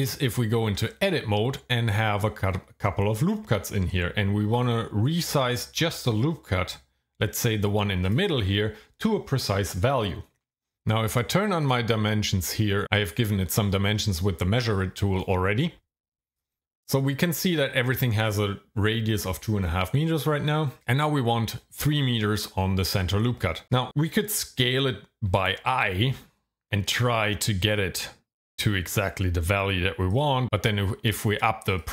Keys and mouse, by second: 11.6 click, 15.1 click, 16.3 click, 25.3 s, 30.1 click, 31.1 click, 31.6 click, 31.8 click.